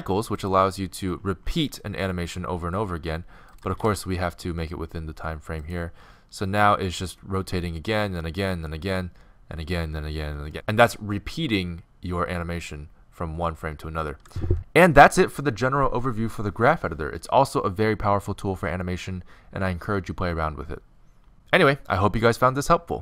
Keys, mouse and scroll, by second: 2.9-3.5 middle drag, 3.5-6.9 right drag, 3.7 g.